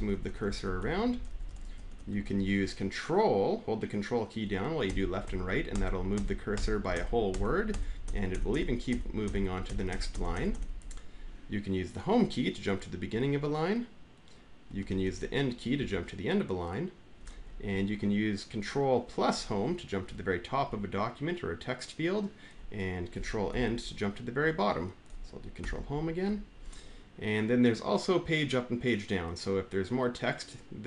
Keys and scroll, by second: 0.1 Right, 0.4 Right, 1.0 Up, 1.0 Left, 2.0 Left, 2.0 Down, 2.0 Up, 4.3 Left, 4.7 ctrl+Right, 5.0 ctrl+Right, 5.5 ctrl+Right, 5.9 ctrl+Right, 6.3 ctrl+Right, 7.0 ctrl+Right, 12.9 Home, 14.5 Down, 14.7 Right, 15.6 End, 17.0 Down, 17.3 Left, 19.8 ctrl+Home, 23.3 ctrl+End, 25.4 ctrl+Home.